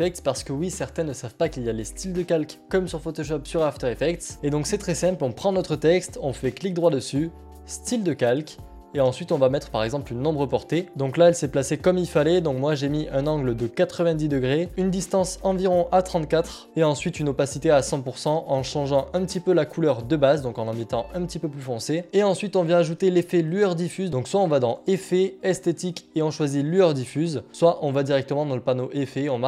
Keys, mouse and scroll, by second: 6.7-10.9 right drag, 10.9 click, 11.8-13.1 middle drag, 13.1 click, 14.0 click, 15.3 middle click, 22.0 scroll, 23.2 click, 24.1 click, 27.4 click, 27.5 click.